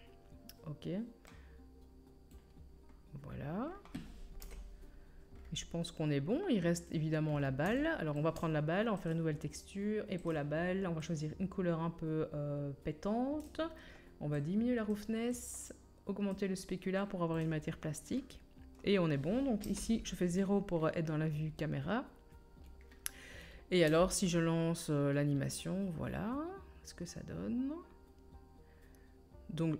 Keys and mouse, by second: 2.9 middle click, 3.8-9.0 drag, 4.4 KP_1, 6.8 middle click, 6.8 right click, 9.0-10.3 middle drag, 10.3-14.3 drag, 14.3-22.8 middle drag, 19.7 KP_0, 23.9 space, 25.8 middle click, 26.0 middle click, 26.2 middle click, 28.0-29.7 drag, 28.0-29.7 middle drag, 28.0-29.7 right drag.